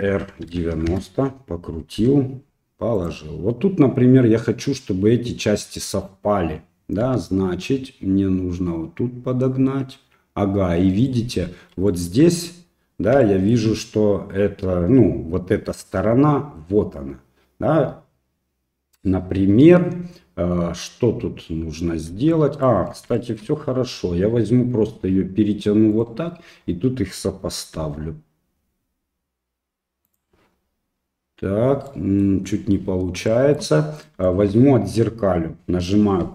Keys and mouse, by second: 0.1 r, 2.0 g, 7.0 g, 11.9 shift+middle click, 13.3 shift+middle click, 22.3 shift+middle click, 23.2 shift+middle click, 23.9 g, 27.8 g, 31.9 middle click, 33.4 shift+middle click, 34.2 shift+middle click.